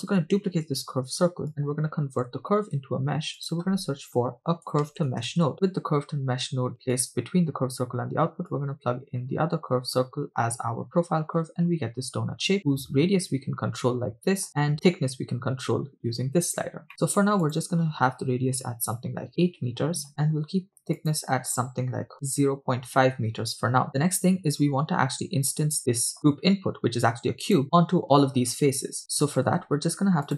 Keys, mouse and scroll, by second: 0.6 shift+d, 1.5 click, 2.8 shift+a, 8.5-10.0 drag, 12.6-14.4 shift+drag, 14.7-16.9 shift+drag, 16.9 middle click, 17.6-20.0 drag, 21.0-22.4 drag, 23.9 middle click, 23.9 scroll down 2, 25.9 middle click, 26.9 click, 28.0 middle click, 29.0 click, 29.5 shift+a.